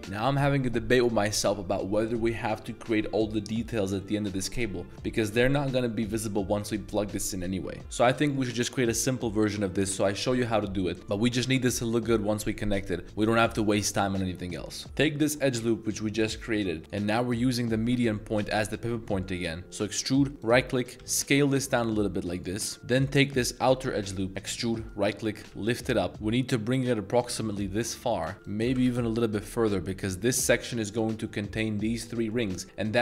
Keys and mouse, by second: 14.8 middle drag, 15.7 middle drag, 16.9-18.5 drag, 19.1 middle click, 19.6 e, 21.0 s, 22.3 click, 23.6 alt+click, 24.2 middle click, 24.3 e, 25.4 g, 25.5 z, 28.1 click, 28.3 z, 28.6 g, 28.8 z, 30.0 click.